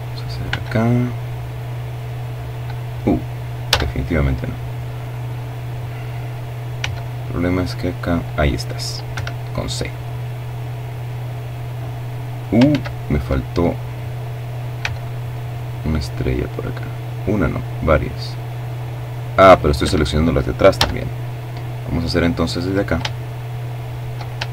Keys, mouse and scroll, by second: 2.5 a, 5.5 c, 5.8-7.3 drag, 7.9 Escape, 8.6-11.6 drag, 11.4 ctrl+z, 13.5 c, 14.0-18.7 drag, 18.6 Escape, 19.5 a, 20.1-22.2 middle drag, 24.2 shift+middle click.